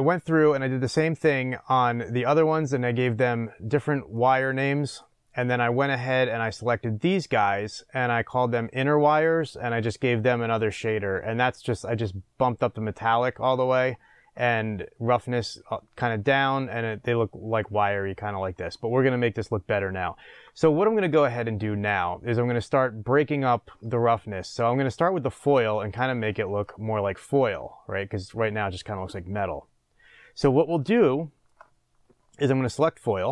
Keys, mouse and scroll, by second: 4.1 click, 4.4 click, 4.8 click, 8.4 click, 11.9-26.0 drag, 26.0-33.1 shift+middle drag, 26.7-28.1 scroll up 2, 28.1-29.8 scroll up 1, 29.8-31.0 scroll up 1, 31.0-32.1 scroll up 1, 32.1-33.1 scroll up 1, 33.1 click.